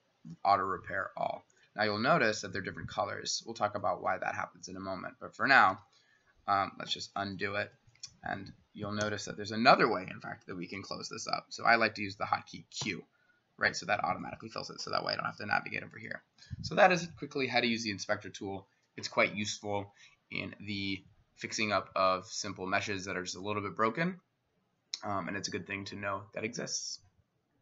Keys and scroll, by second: 5.7 s, 7.0 ctrl+z, 7.4 ctrl+z, 9.0 i, 12.8 q.